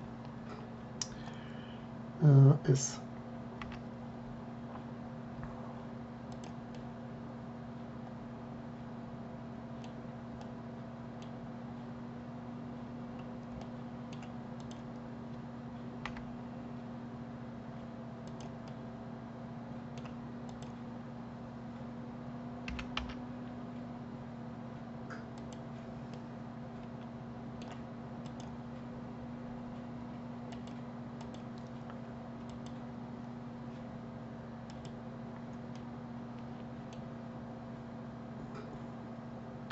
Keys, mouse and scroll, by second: 4.3 s, 7.4-10.6 middle drag, 11.1-14.1 middle drag, 14.3-15.3 middle drag, 15.3 click, 16.7 s, 19.4-21.2 middle drag, 21.2 click, 23.4 g, 26.8-28.9 middle drag, 28.9 click, 31.2-33.3 drag, 35.4 click, 36.4-39.5 middle drag.